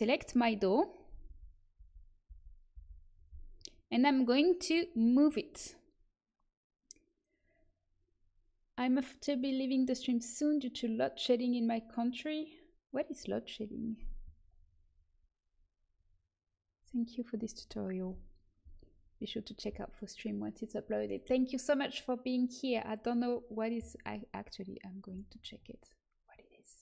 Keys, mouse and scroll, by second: 1.2 l, 2.0 l, 2.2 l, 2.8 l.